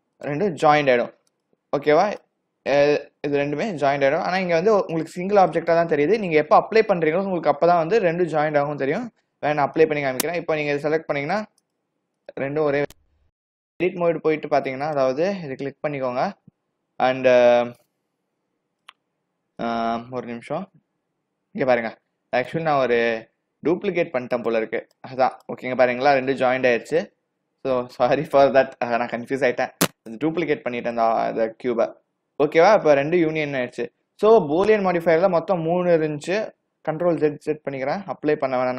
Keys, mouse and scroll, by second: 1.3 click, 2.1 click, 2.8 click, 3.4 click, 5.0 click, 5.5 click, 8.4 a, 8.5 a, 9.8 click, 10.8 click, 11.2 click, 11.7 click, 12.2 click, 12.7 click, 13.7 Tab, 14.4 Tab, 14.9 click, 17.9 click, 19.7 click, 20.6 g, 23.6 g, 24.9 click, 25.4 click, 26.9 click, 28.4 ctrl+z, 29.9 ctrl+z, 30.9 click, 32.9 click, 34.5 click, 37.2 ctrl+z, 37.5 ctrl+z, 37.8 ctrl+z, 38.3 ctrl+z.